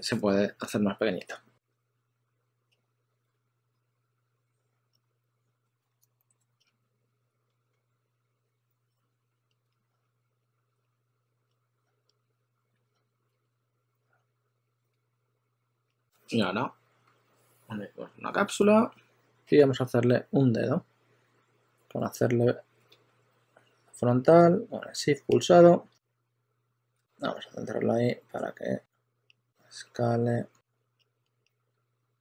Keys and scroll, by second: 3.0-4.3 typing, 6.7 typing, 9.8-13.4 typing, 15.8 s, 26.3 e, 31.6 e, 32.1 w.